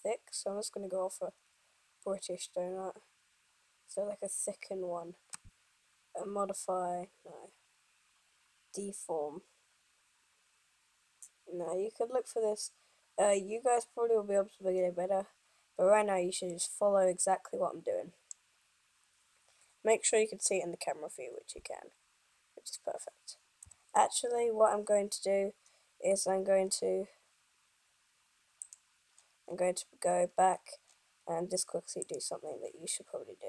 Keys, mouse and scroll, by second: 16.5 middle click, 20.0 KP_0, 26.4 scroll up 1, 27.3-28.8 scroll up 2, 28.8 click, 29.3-29.6 scroll up 1, 31.4-32.1 scroll up 6, 32.2 click, 33.2 middle click, 33.2 scroll up 1.